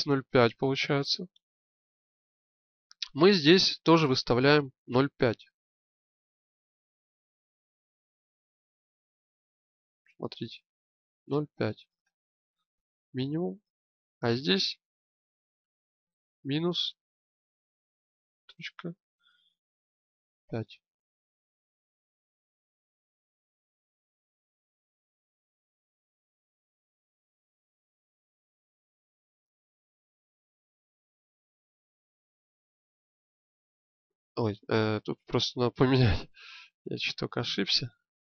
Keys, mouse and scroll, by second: 25.8-29.5 drag, 29.5 g.